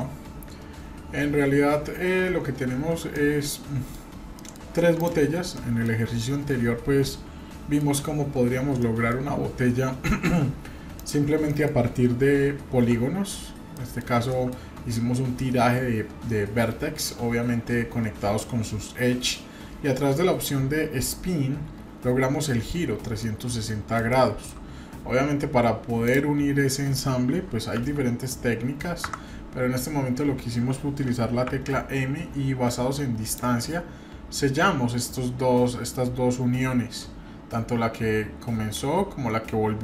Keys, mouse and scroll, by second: 3.1-4.0 middle drag, 4.0 scroll down 1, 4.3 middle click, 4.9 click, 5.5-5.8 middle drag, 6.2-7.8 middle drag, 8.0-8.8 scroll up 1, 8.8 middle click, 9.2-9.5 scroll down 2, 10.9 click, 11.4 middle click, 12.5-12.8 scroll up 1, 12.8 Tab, 13.4 scroll up 2, 13.7 middle click, 14.0 scroll down 1, 14.3 shift+middle click, 16.5-17.2 scroll up 2, 18.5 scroll down 1, 18.8 middle click, 23.2 middle click, 24.1 shift+middle click, 24.7-25.5 scroll up 2, 26.1 click, 27.8 g, 31.5 m, 33.3 click, 33.8 scroll up 2, 34.6-36.2 scroll up 1, 36.6-37.1 scroll down 2.